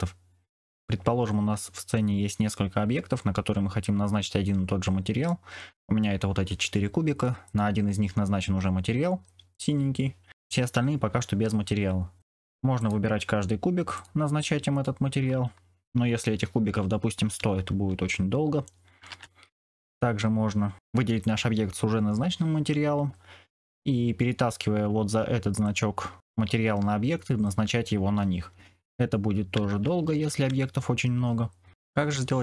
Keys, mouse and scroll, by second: 5.2 middle click, 7.5 click, 11.6 middle click, 13.9 click, 19.0 ctrl+z, 29.6 ctrl+z, 30.0 ctrl+z.